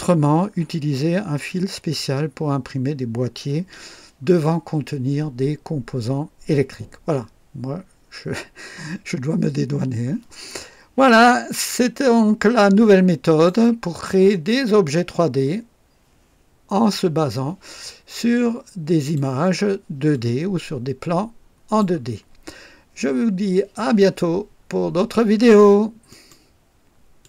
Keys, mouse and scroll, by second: 11.2-13.6 drag, 13.9 click, 16.9-19.3 drag, 20.1-21.9 drag, 26.1 right click, 27.2 click.